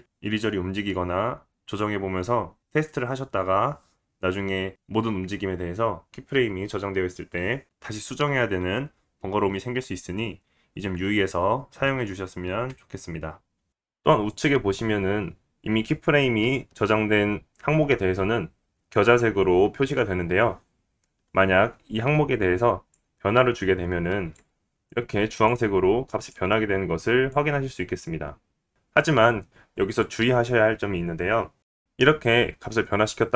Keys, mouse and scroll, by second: 13.7-33.3 middle drag, 13.7-33.3 right drag.